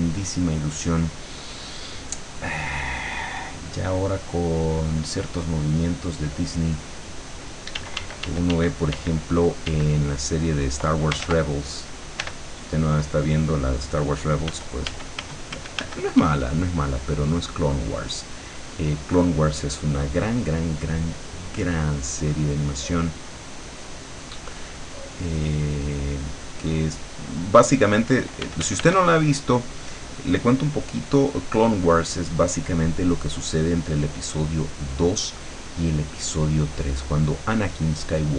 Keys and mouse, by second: 3.9 click, 6.3 click, 7.8 d, 9.7 d, 10.2 click, 11.3 ctrl+z, 12.3 e, 12.8 click, 14.6 f, 16.2 d, 16.5-19.2 drag, 19.4-23.6 drag, 24.4-28.2 drag, 28.5 f, 29.0-35.4 drag, 36.5-38.3 drag.